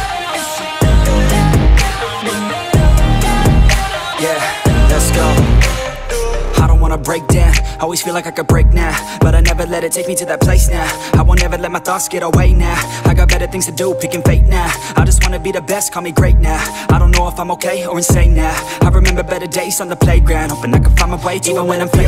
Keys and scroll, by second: 20.3 ctrl+a, 20.9 m.